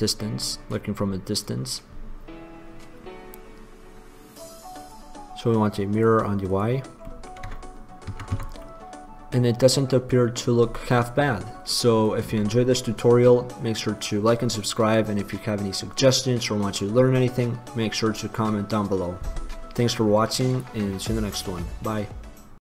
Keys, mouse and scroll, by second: 6.2-7.3 drag, 7.3 middle click, 8.6 Tab.